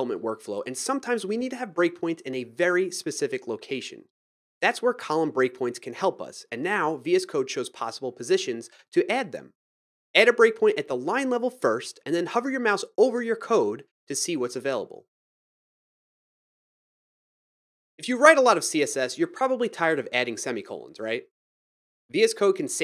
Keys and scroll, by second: 17.5 shift+5, 17.7 ;, 21.2 ctrl+,, 22.3-22.8 typing.